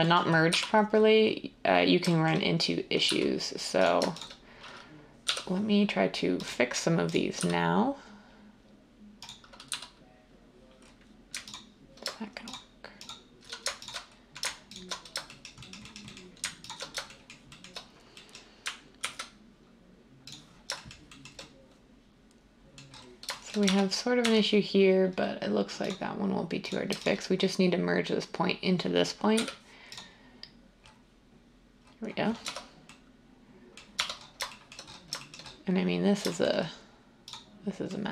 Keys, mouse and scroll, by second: 0.5 a, 3.1 z, 5.3 j, 7.3 x, 9.7 z, 19.0 ctrl+b, 23.6 Tab, 24.2 Tab, 29.4 m, 32.4 Tab, 33.9 Tab.